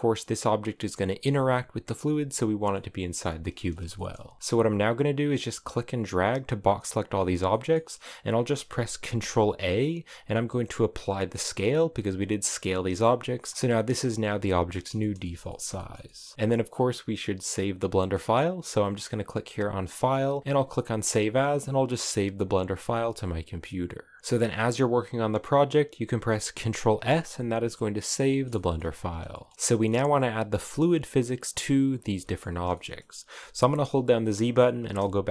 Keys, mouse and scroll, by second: 2.4-4.4 middle drag, 4.4 b, 5.2 click, 7.3-8.8 middle drag, 8.8 ctrl+a, 13.1 middle click, 13.9 a, 14.3-19.5 shift+middle drag, 19.5-22.4 drag, 24.2-28.1 middle drag, 28.1 scroll up 1, 28.3 middle click, 28.5 ctrl+s, 29.1-30.3 shift+middle drag, 30.3 right click, 30.9 right click, 31.6 right click, 32.0 shift+middle click, 32.2-32.5 scroll up 1, 32.5-34.6 middle drag, 34.6 z, 34.8-35.3 scroll up 5.